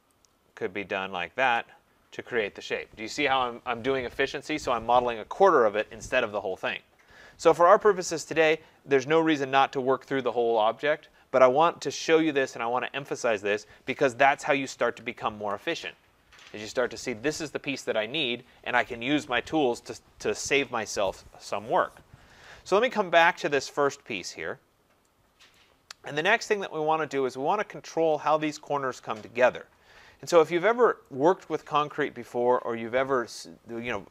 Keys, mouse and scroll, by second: 0.1 click, 1.5 click, 9.0-12.0 scroll, 12.0-13.4 scroll, 13.5 click, 14.5 ctrl+z, 15.0 ctrl+z, 23.0 scroll, 23.6-24.4 scroll, 25.5 right click, 26.4 middle click, 26.5 middle click, 26.6 scroll, 30.1-30.6 scroll, 31.1 right click, 31.8-33.3 scroll.